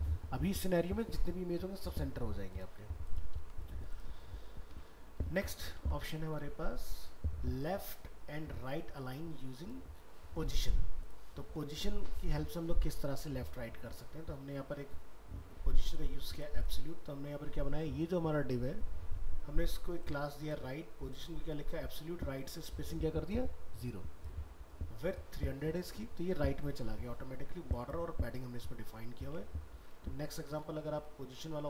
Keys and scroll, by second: 3.4 ctrl+w, 4.7 alt+Tab, 5.8 ctrl+w, 29.3 alt+Tab.